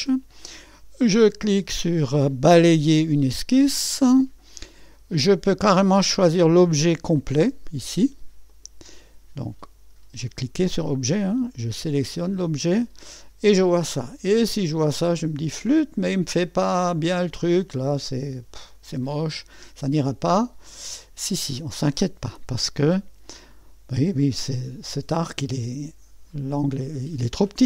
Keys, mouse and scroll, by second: 3.1 click, 8.5 click, 8.9 click, 12.1 click, 13.1 click, 14.2-14.7 scroll up 1, 15.0-15.4 scroll down 1, 15.4 click, 17.6-21.9 drag, 24.2 click.